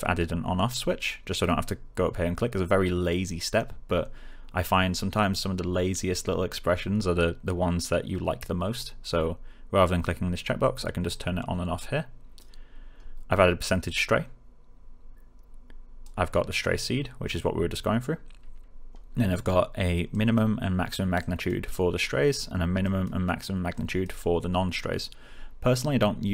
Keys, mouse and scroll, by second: 11.0-12.6 click.